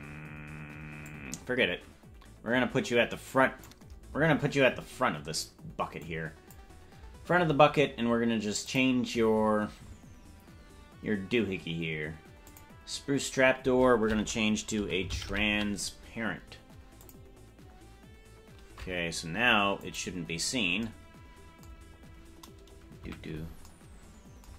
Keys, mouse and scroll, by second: 1.0-3.7 drag, 6.0 click, 8.6 click, 12.5-17.9 drag, 19.8 click, 21.8-23.0 scroll up 6, 23.0 KP_Decimal.